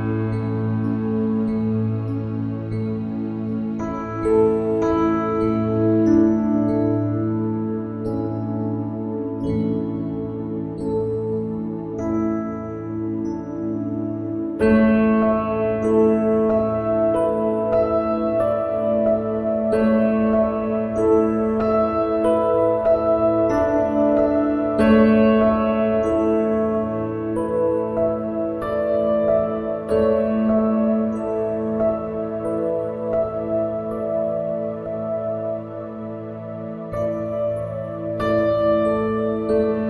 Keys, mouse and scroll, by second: 3.0 ctrl+b, 7.9 a, 9.5-14.1 drag, 13.4 ctrl+b, 22.9 KP_1, 26.2 ctrl+r, 31.5-32.8 middle drag, 32.8 ctrl+r, 36.9 ctrl+b.